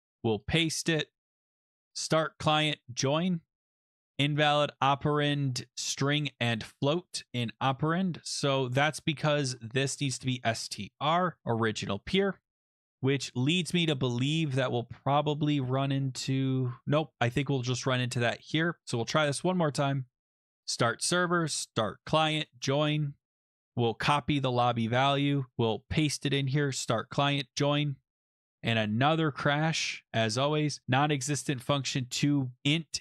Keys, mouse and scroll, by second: 0.0 ctrl+v, 0.7 click, 1.2 click, 1.2 alt+click, 1.7 click, 2.6 click, 3.8 click, 9.0 click, 9.7-12.6 typing, 13.3 scroll, 15.5 click, 15.7 scroll, 15.9-16.5 scroll down 6, 16.5-17.0 scroll up 4, 17.1 ctrl+s, 19.5 click, 20.6 click, 20.6 scroll, 21.3 click, 21.9 click, 22.5 click, 23.3 click, 23.4 click, 23.8 ctrl+c, 25.0 click, 25.3 click, 25.5 click, 25.8 click, 25.9 ctrl+v, 26.6 click, 27.3 click, 28.8 click, 32.6 click.